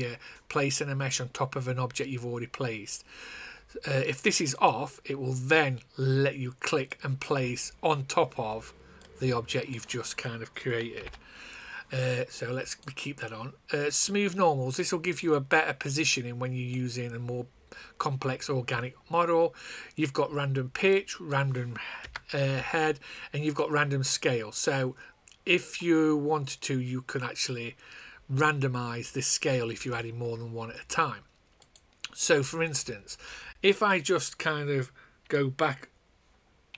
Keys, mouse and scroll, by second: 4.5 click, 10.9 ctrl+z, 12.6 click, 20.9 click, 22.0 KP_0, 23.5 click, 31.5 click.